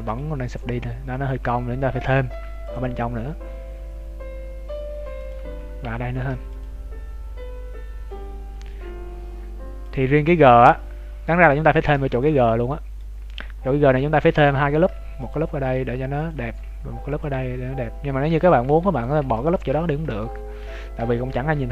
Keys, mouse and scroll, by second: 0.2 Tab, 1.3 Tab, 2.3 ctrl+r, 6.1 ctrl+r, 10.1 scroll down 2, 11.3 scroll down 23, 12.0 shift+middle click, 12.4 middle click, 13.1 scroll up 3, 14.7 ctrl+r, 14.7 scroll up 8, 16.7 ctrl+r, 18.9 ctrl+click, 19.2 ctrl+d, 19.3 click, 19.8 ctrl+x, 20.6 ctrl+z.